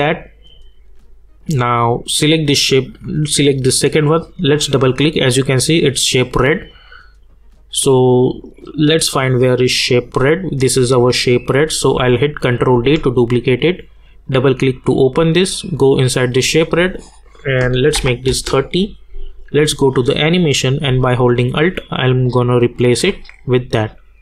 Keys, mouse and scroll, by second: 2.1 click, 6.3 click, 10.4 click, 12.7 ctrl+d, 14.1 click, 18.2 Return, 19.5 click, 21.4-24.2 alt+drag.